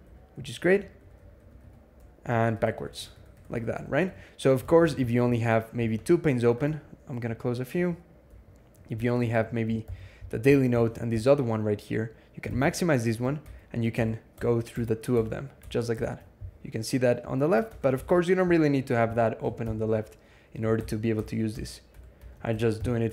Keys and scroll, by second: 2.1 ctrl+shift+Tab, 2.3 ctrl+shift+Tab, 2.7-4.0 ctrl+shift+Tab, 4.4 alt+x, 6.5 ctrl+w, 7.0 ctrl+w, 9.7 alt+t, 12.3 alt+x, 13.2 ctrl+Tab, 13.8-18.0 ctrl+Tab, 19.5 ctrl+shift+h, 20.6 ctrl+Tab, 21.0 ctrl+Tab, 22.6 ctrl+shift+h.